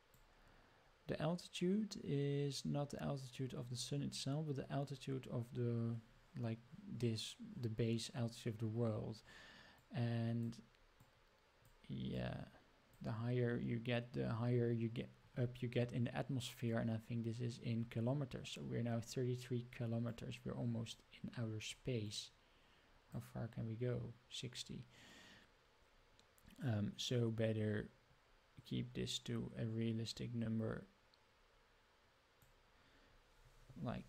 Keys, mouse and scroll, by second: 9.8 click, 11.0 click, 12.1 click, 20.1-21.7 drag, 22.0-23.1 drag, 24.6-32.4 drag.